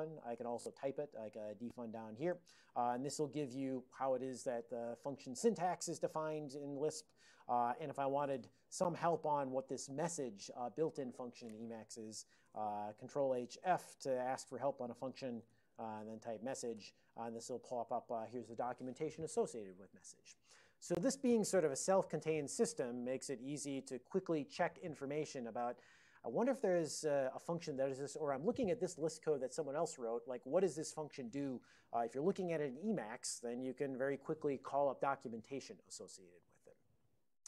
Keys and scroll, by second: 0.0-1.4 typing, 3.1 Return, 3.1 alt+o, 3.4 ctrl+n, 3.6 ctrl+n, 12.5 ctrl+h, 15.4-16.9 typing, 17.9 ctrl+n, 18.1 ctrl+n.